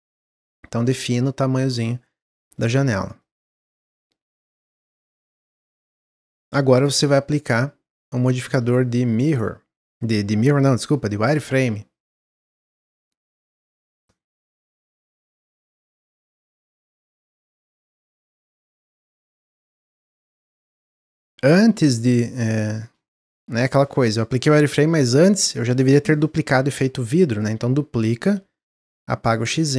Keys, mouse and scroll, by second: 3.2-4.8 middle drag, 4.8 Tab, 5.1-5.9 middle drag, 5.9 click, 10.8 drag, 11.4 shift+middle click, 11.6-12.5 scroll up 1, 12.6-15.7 shift+drag, 17.0 click, 17.4-19.7 middle drag, 19.7 scroll down 1, 20.0-20.7 middle drag, 20.7 click, 26.6 shift+d, 29.2-29.7 drag.